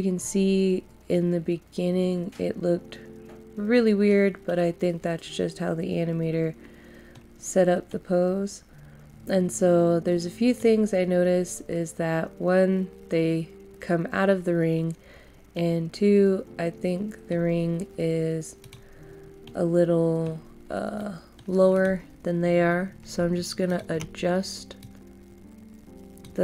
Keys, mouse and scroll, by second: 0.4 scroll down 1, 1.1 middle click, 1.4-7.0 middle drag, 7.4 scroll down 1, 7.8 middle click, 18.6 click, 19.0 scroll down 1, 19.4 middle click, 20.3 scroll up 1, 20.9 middle click, 21.7-26.4 drag.